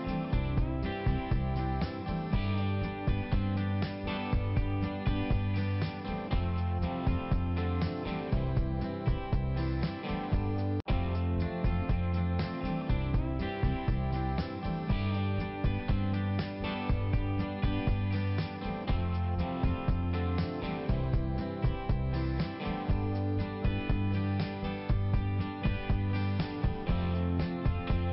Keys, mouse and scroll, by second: 0.0 double click, 0.1 double click, 0.5 click, 0.7 click, 1.2 click, 1.6 click, 1.8 double click, 2.1 click, 3.9 click, 4.3 click, 4.5 click, 4.7 click, 4.9 click, 5.1 click, 5.5 click, 5.7 click, 6.4 click, 6.5 click, 6.7 click, 6.9 click, 7.0 click, 7.6 click, 7.7 click, 8.0 click, 8.1 double click, 8.3 double click, 8.4 double click, 9.0 click, 10.7 click, 11.2 click, 11.4 click, 11.5 click, 11.8 double click, 11.9 double click, 12.1 double click, 12.3 double click, 12.4 double click, 12.6 double click, 13.0 click, 13.1 click, 13.2 click, 13.7 click, 13.8 click, 14.0 click, 14.1 double click, 14.2 double click, 14.3 double click, 14.6 double click, 14.7 double click, 15.0 double click, 15.1 double click, 15.3 double click, 15.5 double click, 15.7 double click, 15.8 double click, 16.3 click, 16.4 click, 16.8 click, 16.9 click, 17.2 click, 17.3 double click, 17.6 double click, 17.7 double click, 17.8 double click, 18.0 double click, 18.3 double click, 18.4 double click, 18.9 click, 20.2 click, 20.3 click, 20.5 click, 20.6 double click, 20.9 double click, 21.0 double click, 21.2 double click, 21.3 double click, 21.5 double click, 21.7 double click, 21.9 double click, 22.1 double click, 22.4 double click, 22.4 double click, 22.6 double click, 22.8 double click, 24.4 click, 25.6 click, 26.6 click.